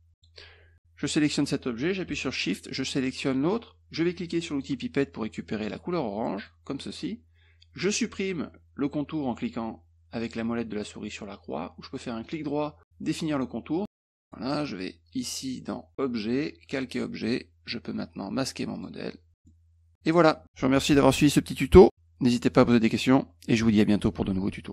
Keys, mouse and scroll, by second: 2.7 shift+click, 4.5 click, 6.3 click, 12.2 right click, 13.3 click, 14.0 click, 15.9 click, 16.6 click, 18.7 click, 19.3 middle click, 19.8 click.